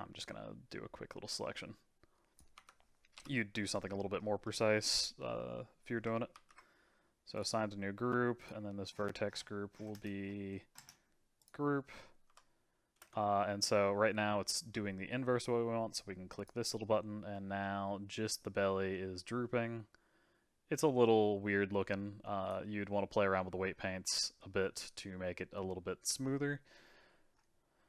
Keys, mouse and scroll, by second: 3.1 KP_Divide, 3.7-6.3 middle drag, 6.3 ctrl+g, 8.4-11.4 drag, 12.2 Tab, 13.0 space, 16.4 click, 17.3-21.4 middle drag, 21.4-22.4 scroll up 2, 22.4-23.8 drag, 23.8-24.1 scroll down 1, 24.1-27.7 middle drag.